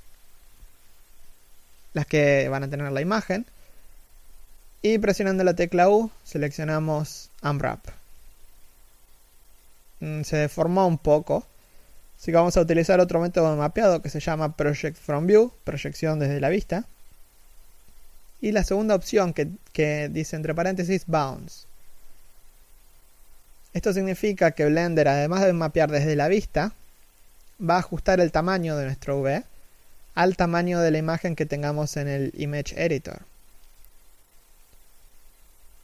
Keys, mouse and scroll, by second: 1.0 scroll down 1, 1.3 middle click, 5.1 u, 8.9 u, 9.4 1, 12.1 u, 17.1 scroll up 1, 19.1 middle click, 20.2 KP_1.